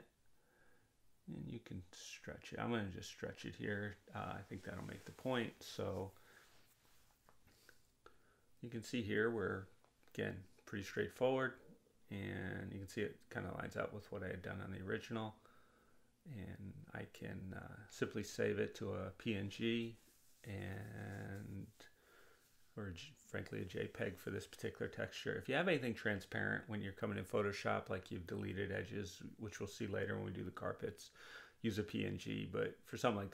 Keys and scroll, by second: 7.9 Return.